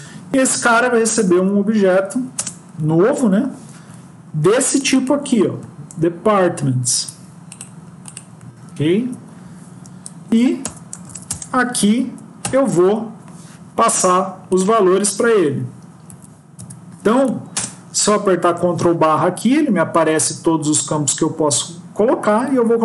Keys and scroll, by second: 7.0 ctrl+c, 8.6 ctrl+v, 11.9 Down, 12.7 Up, 16.0 End, 16.5 Tab, 17.4 ctrl+space.